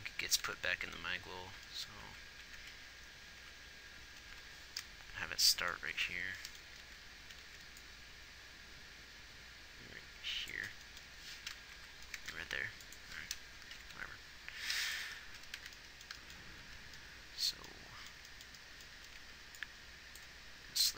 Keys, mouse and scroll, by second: 0.5 Left, 1.4 Left, 2.4 Right, 2.7 Right, 2.9 Right, 3.8 Right, 4.5 Left, 7.2 alt+a, 8.3 alt+a, 12.1 Right, 14.2 Left, 15.1 g, 15.9 z, 17.0 a, 17.3 a, 19.3 a, 19.5 b.